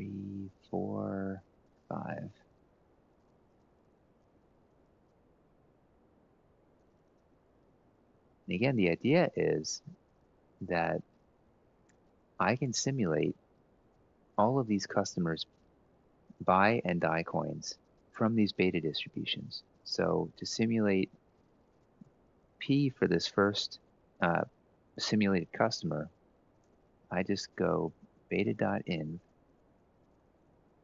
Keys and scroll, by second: 0.0 shift+Page_Down, 3.5 ctrl+v, 3.8 Down, 4.6-5.3 shift+Up, 5.5 shift+Up, 6.2 shift+Up, 6.5 Delete, 6.9 Up, 8.1 Right, 8.9 1, 9.2 Left, 9.8 ctrl+Up, 13.9 Tab, 13.9-16.9 typing, 19.4 Down, 21.7 =, 26.3-28.6 typing, 29.9-30.8 typing.